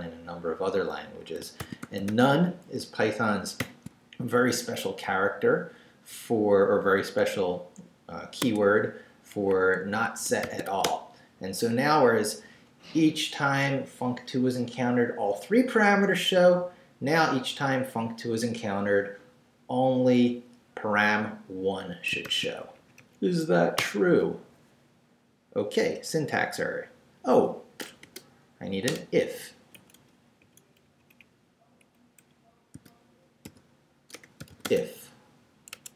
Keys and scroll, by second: 1.3-3.6 typing, 4.6 shift+Down, 5.1 Left, 8.4 Tab, 9.9 Escape, 10.4 shift+;, 10.7 shift+w, 10.8 Return, 22.2 shift+;, 22.7 shift+Up, 23.8 Return, 28.9 shift+Return, 29.5 Left, 29.7 Right, 30.0 Left, 30.4 Right, 30.8 Up, 31.8 Down, 32.2 Left, 32.7-34.6 typing, 35.7 Escape.